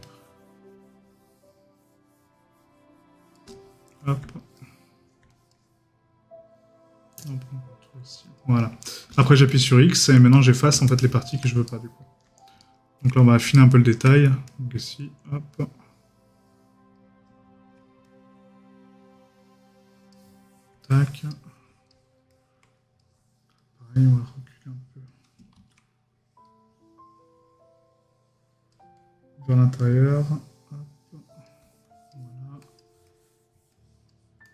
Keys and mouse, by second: 4.6 middle click, 9.6 right click, 11.7 right click, 22.3 middle click, 33.1 middle click.